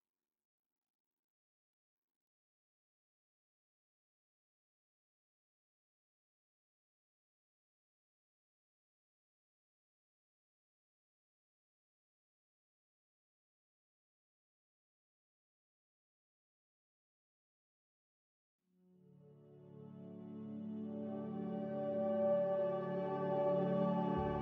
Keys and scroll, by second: 4.1 Escape, 4.4 Escape, 4.6 Escape.